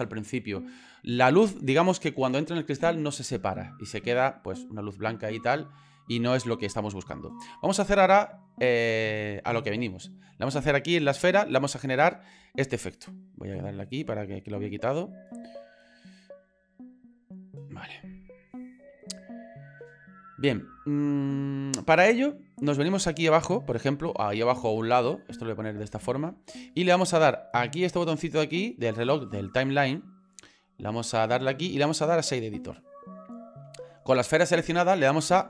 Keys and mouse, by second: 8.4 shift+middle click, 12.0 middle click, 13.5 click, 14.9 middle click, 15.6 middle click, 16.0 click, 16.7 click, 17.3 middle click, 18.0 click, 19.3 shift+middle click, 23.7 click, 24.1 right click, 24.2 click, 25.5 shift+middle click, 31.1-32.4 drag.